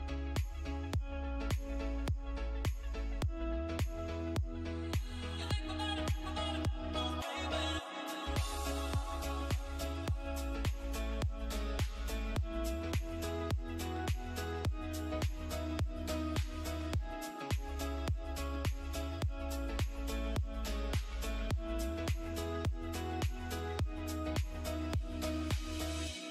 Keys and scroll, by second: 7.0 F3, 7.3 F2, 11.0 ctrl+r, 16.9 shift+Page_Down, 18.5 F3, 21.8 space, 23.4 c, 23.4 e, 23.9 Escape.